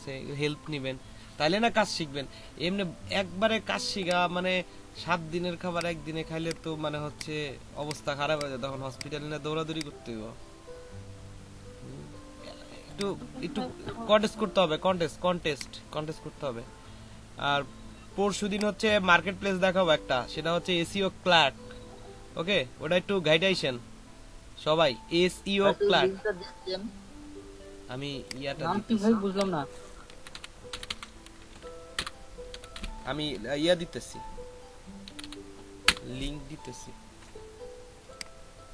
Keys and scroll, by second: 30.3-32.7 typing, 33.9 a, 35.0 c, 35.2 k, 35.8 Return.